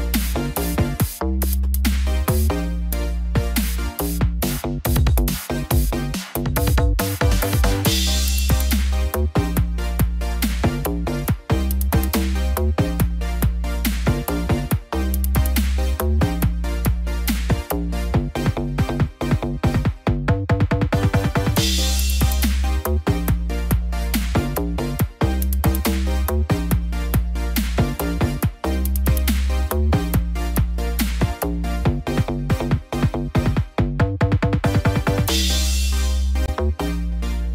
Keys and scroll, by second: 19.7 ctrl+shift+s.